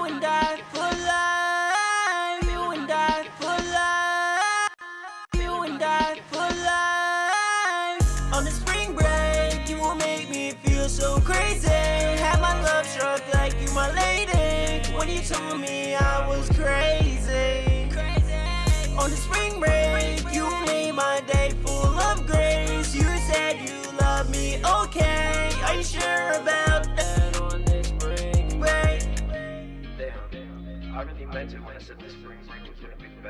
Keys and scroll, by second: 2.4 ctrl+super+w, 8.0 super+s, 9.9 super+s, 10.6 super+Tab, 12.2 super+Tab, 16.1 super+`, 31.1-32.1 typing, 32.2 Return, 32.9 ctrl+super+w.